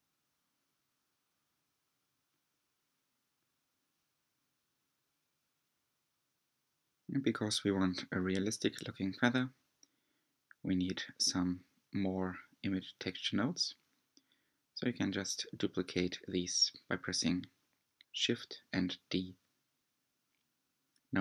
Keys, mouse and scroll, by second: 0.0 click, 2.6-3.9 scroll up 6, 3.9-6.7 middle drag, 8.0 scroll down 3, 8.5-10.0 shift+middle drag, 10.0 click, 10.8 g, 11.7 click, 13.2 shift+d, 15.6 click, 18.4 shift+d.